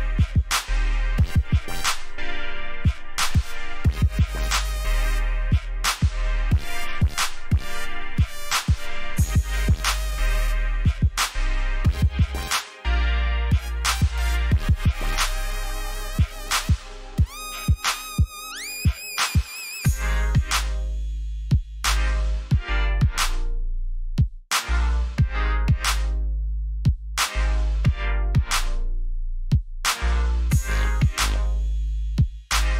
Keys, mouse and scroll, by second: 1.3-1.6 alt+scroll up 2, 2.1 scroll down 1, 2.6 scroll down 1, 2.8 scroll up 1, 3.6 scroll down 1, 4.5-4.9 scroll down 1, 5.4-5.7 scroll up 1, 6.0 click, 6.9 ctrl+shift+s, 8.8 click, 14.4-15.7 typing, 17.2 alt+scroll down 1, 17.8 alt+scroll up 1, 19.0 click, 27.0 scroll down 1, 28.0 click.